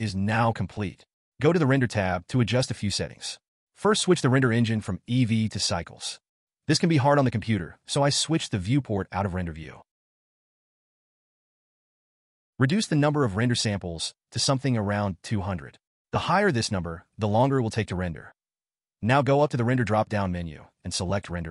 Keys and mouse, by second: 0.6 click, 2.5-3.5 drag, 13.5-16.3 drag, 15.7 0, 20.4-21.5 drag.